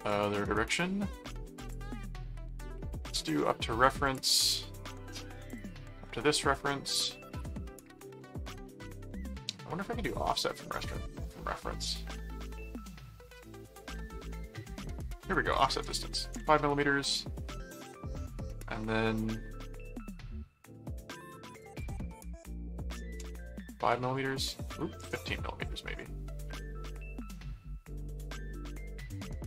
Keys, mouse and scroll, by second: 0.0 click, 1.6 click, 3.2 click, 4.0 click, 4.4 middle click, 5.4 click, 6.0 middle click, 13.7 click, 15.3 click, 21.6 click, 26.2-27.7 middle drag.